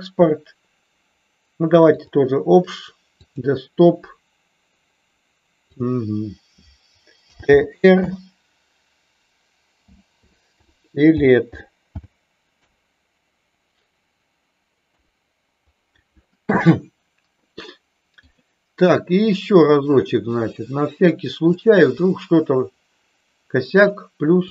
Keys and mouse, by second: 18.1-21.8 drag.